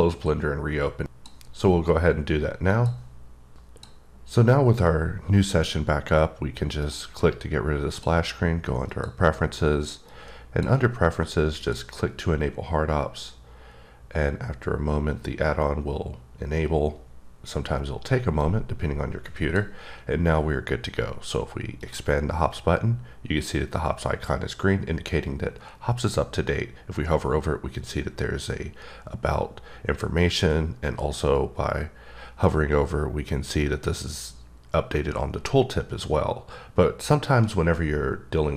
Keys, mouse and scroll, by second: 1.5 click, 4.0 click, 9.1 click, 10.3 click, 11.9 click, 18.6 click, 20.7-22.0 scroll up 3, 22.0 click, 38.4 scroll up 3.